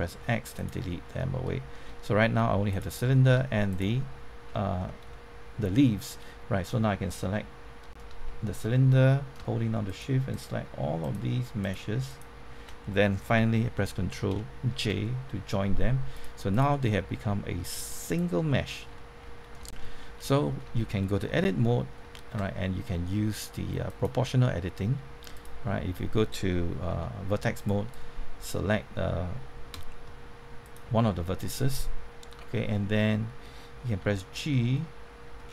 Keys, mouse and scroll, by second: 0.1 x, 0.5 click, 1.1 middle click, 2.7 click, 3.7 shift+click, 4.8 scroll down 1, 5.1-6.9 middle drag, 9.8 shift+click, 11.6 shift+click, 12.0 shift+click, 14.2 ctrl+j, 16.1 click, 17.2 middle click, 18.0 click, 18.5 middle click, 18.9 shift+middle click, 19.2 scroll up 1, 19.9 shift+middle click, 20.2 middle click, 20.7 shift+middle click, 21.3 Tab, 22.1 shift+middle click, 23.8-24.9 drag, 26.8 1, 27.5-28.9 drag, 33.9 g, 34.7-35.4 scroll up 1, 35.4-35.5 scroll down 1.